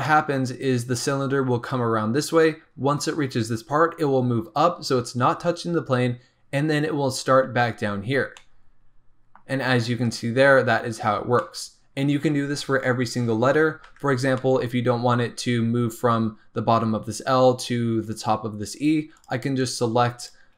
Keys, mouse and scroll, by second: 0.0-3.0 middle drag, 8.3-11.0 middle drag, 11.0-11.3 scroll up 2, 11.3 middle click, 12.0-13.8 scroll down 1, 13.8 Tab, 14.2 scroll up 1, 14.3-17.3 middle drag, 19.1 click, 19.5 click, 20.1 click.